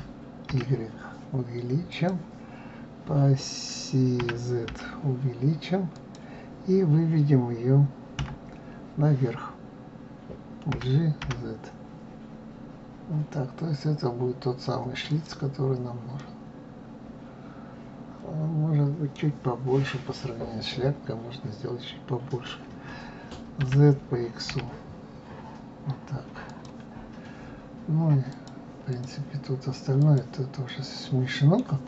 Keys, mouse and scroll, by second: 8.2 KP_3, 10.7 g, 16.2-19.2 middle drag, 28.3 click, 28.9 click, 29.9 click, 30.7-31.8 middle drag.